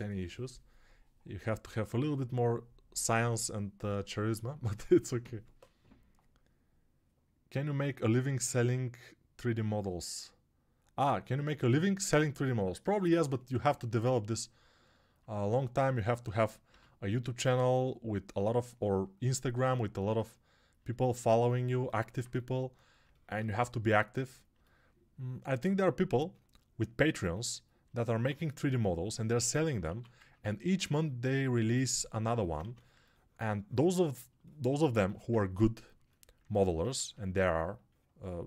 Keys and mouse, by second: 16.6 g, 29.8 1, 32.5 2, 36.7 1.